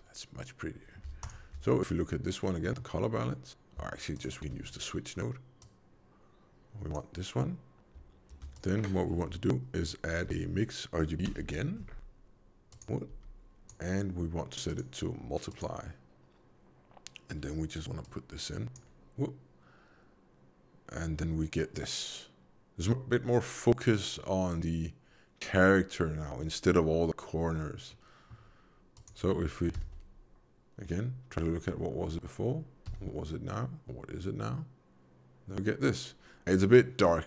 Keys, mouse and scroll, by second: 1.2 ctrl+shift+click, 2.5 middle click, 4.1 ctrl+shift+click, 5.5 click, 8.2 shift+a, 13.1 g, 14.7 click, 18.0 click, 27.7 middle click, 28.9 click, 29.7 m, 32.8 m.